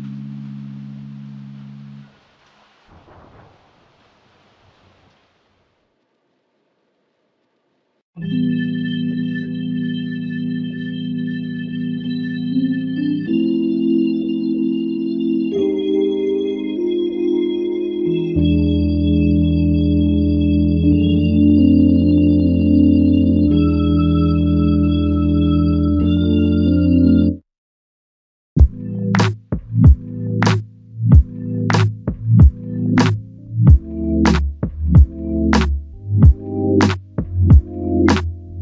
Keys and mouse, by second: 2.0 double click, 11.7 alt+click, 13.0 alt+click, 15.4 alt+click, 23.0 double click, 32.5 double click.